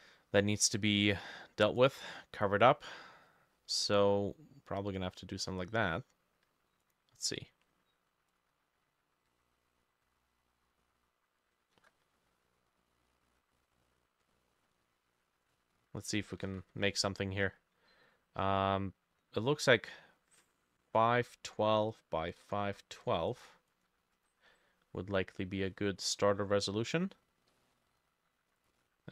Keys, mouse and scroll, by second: 0.9 middle click, 3.2-3.9 scroll down 10, 3.9 middle click, 5.8 Tab, 9.3 middle click, 16.5 ctrl+n, 21.1-23.2 typing, 23.7 double click, 24.2 double click, 26.7-27.2 scroll down 2, 27.2-27.5 scroll up 1, 27.5 middle click.